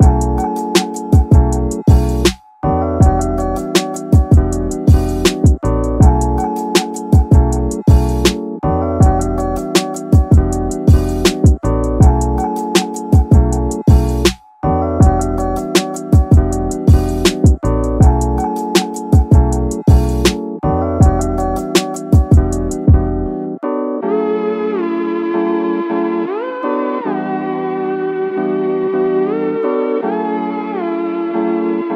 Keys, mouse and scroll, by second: 2.2-6.1 drag, 7.5 click, 10.0-10.5 middle drag, 10.5 scroll up 1, 10.7 scroll down 1, 10.9 middle click, 12.4-13.1 drag, 13.5 Tab, 14.0 middle click, 14.3 Tab, 14.7 click, 15.0 middle click, 15.6-16.7 drag, 17.0-18.6 middle drag, 19.3 x, 19.8-20.3 middle drag, 22.2 click, 24.4-31.9 drag.